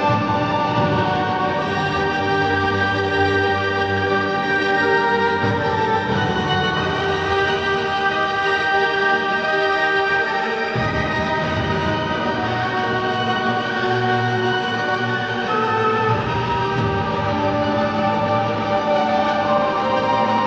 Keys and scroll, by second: 1.5 space, 3.7 ctrl+KP_Subtract, 3.9 ctrl+KP_Add, 5.2 ctrl+j, 6.8 alt+Delete, 7.3 space, 12.3 ctrl+z, 13.5 space, 15.5 ctrl+j, 16.9 ctrl+alt+g, 17.5 ctrl+Delete.